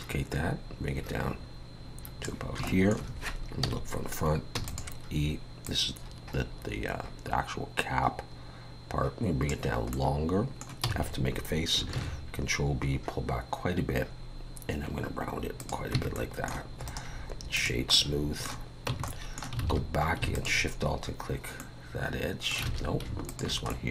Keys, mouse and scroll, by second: 2.7 shift+middle click, 3.6 KP_1, 4.6 e, 5.7 click, 9.9 middle click, 10.9 f, 12.0 ctrl+b, 16.0 Tab, 16.2 middle click, 16.9 right click, 17.9 middle click, 18.9 Tab, 19.1 middle click, 19.6 alt+a, 20.3 alt+shift+click, 21.3 scroll up 2, 21.6 middle click, 22.7 alt+a, 23.3 alt+shift+click, 23.7 middle click.